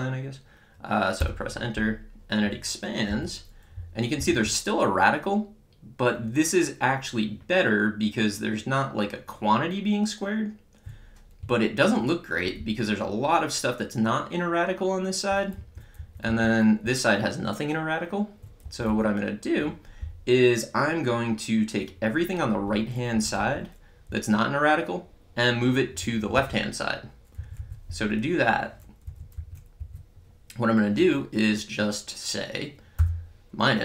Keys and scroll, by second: 1.1 Return, 3.1 Up, 4.2 Left, 4.5 Right, 12.6 Left, 15.6 Down, 16.0 Up, 16.3 Left, 16.9 Right, 18.7 Down, 23.2 Up, 23.4 Right, 24.1 Left, 27.4 Down, 29.1 Up, 29.4 Left, 29.8 Down, 33.0 -.